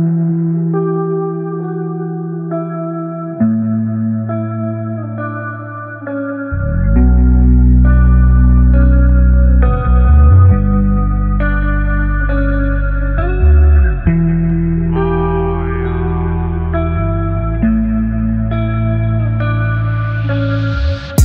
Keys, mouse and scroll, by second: 2.3-3.9 alt+drag, 3.9 alt+scroll down 1, 4.9-7.2 drag, 7.2-19.7 alt+drag.